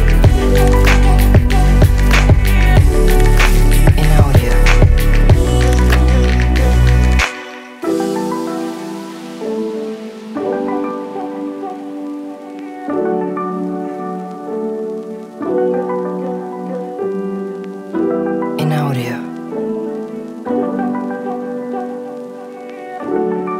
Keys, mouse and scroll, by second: 1.0 click, 2.4-4.1 drag, 6.4-7.0 drag, 7.8 s, 11.4 click, 13.2 shift+middle click, 13.6 click, 13.9-14.6 drag, 15.0 x, 15.8-16.3 middle drag, 15.8 x, 16.8-17.8 drag, 18.0 x, 18.9 click, 19.7 click, 20.7 click, 22.4-23.5 drag.